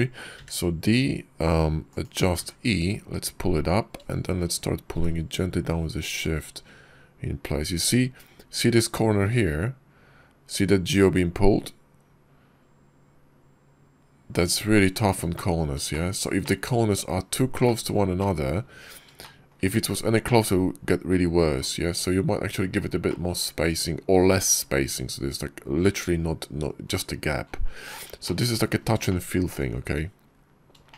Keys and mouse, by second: 0.2 d, 15.2 middle click, 15.8 shift+middle click, 16.3 shift+middle click, 17.5 click, 18.0 shift+click, 19.0 shift+click, 19.1 shift+middle click, 22.9 shift+middle click, 28.1 shift+middle click, 28.9 shift+middle drag, 30.7 shift+middle click.